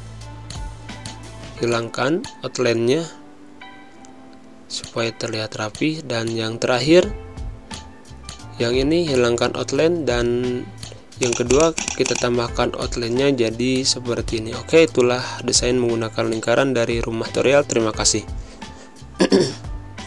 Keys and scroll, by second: 1.5 space, 13.6 space, 15.4 z, 16.6 space.